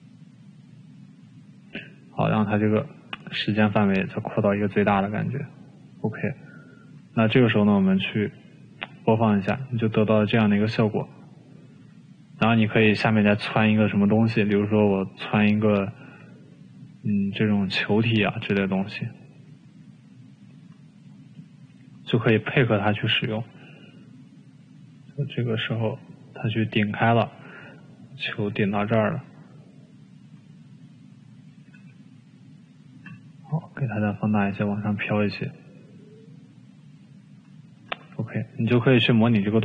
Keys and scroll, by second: 19.0 t, 20.8 e, 33.8 t, 35.4 e.